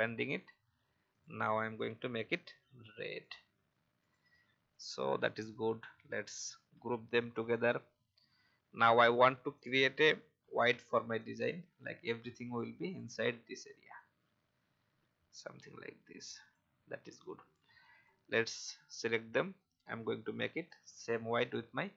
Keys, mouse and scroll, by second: 7.2 alt+scroll down 1, 7.8-8.3 scroll down 1, 9.5 click, 11.2-12.6 drag, 12.8 click, 14.0-16.5 alt+drag, 17.2 click, 19.5 shift+click, 21.5 shift+click.